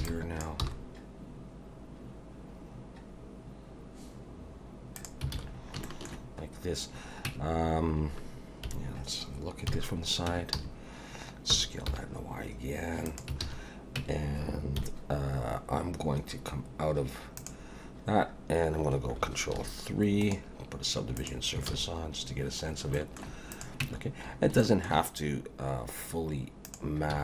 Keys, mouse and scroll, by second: 0.0 b, 0.6 g, 5.3 alt+a, 5.5 scroll down 3, 5.8 shift+middle click, 7.2 Tab, 8.6 KP_1, 9.7 KP_3, 10.3 Tab, 10.5 a, 11.5 s, 13.4 alt+a, 14.0 Tab, 14.8 KP_1, 17.4 click, 19.5 ctrl+3, 20.2 right click, 21.7 alt+a, 22.9 shift+middle click, 23.5 click, 23.8 Tab, 24.3 scroll up 1, 24.6 shift+middle click, 26.7 click, 27.1 z.